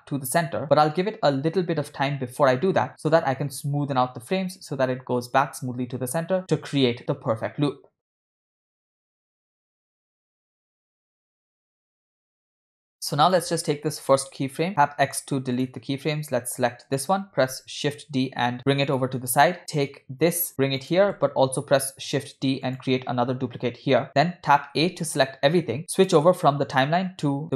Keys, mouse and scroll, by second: 8.9 space, 8.9 g, 10.1 space, 10.4 click, 10.9 space, 11.0 space, 12.2 space, 12.5 click, 13.2 click, 14.7 x, 16.5 click, 17.4 shift+d, 19.6 click, 20.2 g, 21.6 shift+d, 24.7 a, 25.9-27.5 drag.